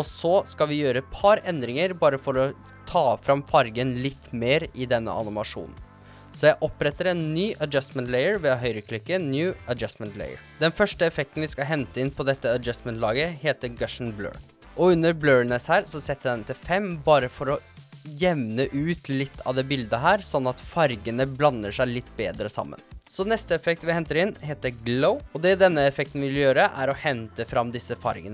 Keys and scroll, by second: 13.6-14.7 typing, 17.4 5, 17.7 Return, 24.3-25.2 typing.